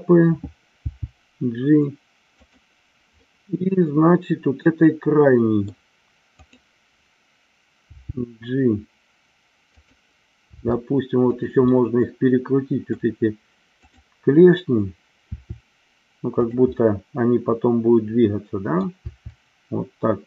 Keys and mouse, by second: 0.8 g, 2.3 click, 3.2-5.8 middle drag, 7.8 g, 9.7 click, 10.4 r, 11.3 click, 11.6-13.1 middle drag, 13.7-14.8 drag, 15.3 r, 16.4 click, 16.7-18.9 middle drag, 19.0 r.